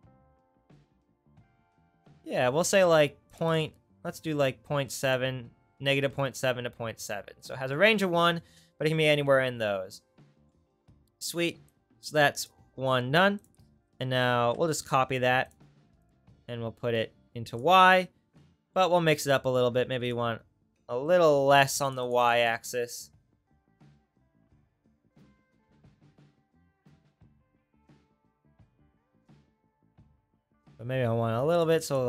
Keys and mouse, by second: 13.5-14.8 drag, 14.8 right click, 15.4 click, 16.2 click.